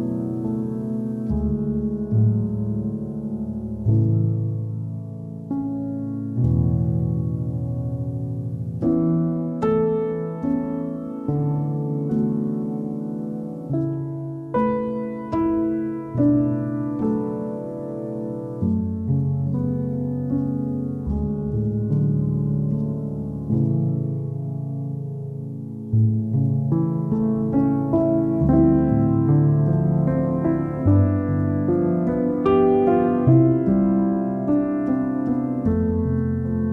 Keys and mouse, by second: 0.3 click, 0.3 g, 0.6 click, 0.6 g, 1.1 g, 2.3 click, 2.3 g, 2.8 g, 3.1 click, 3.1 g, 3.5 alt+middle click, 3.9 KP_3, 5.4 g, 6.4 g, 6.8 g, 6.9 click, 7.0 g, 8.0 Tab, 8.0 click, 8.1 alt+middle click, 8.5 KP_1, 8.7 click, 8.8 middle click, 8.9 click, 9.0 Tab, 9.2 click, 9.5 3, 10.2 shift+click, 10.5 alt+middle click, 11.1 KP_1, 11.3 e, 12.8 s, 13.6 alt+middle click, 14.3 2, 14.4 click, 15.0 s, 17.4 middle click, 17.5 ctrl+z, 17.8 s, 19.0 g, 20.0 alt+middle click, 20.5 alt+middle click, 21.2 g, 21.7 click, 21.8 g, 22.1 KP_1, 22.8 shift+middle click, 23.0 alt+middle click, 23.4 middle click, 23.7 click, 23.8 alt+middle click, 24.0 shift+middle click, 24.2 Tab, 25.4 click, 25.9 click, 26.5 alt+middle click, 27.3 Tab, 27.8-31.1 typing, 30.4 click, 31.5 click, 32.1 g, 32.4 g, 33.0 g, 34.2 click, 34.9 g, 35.0 g, 35.8 g, 36.3 Tab.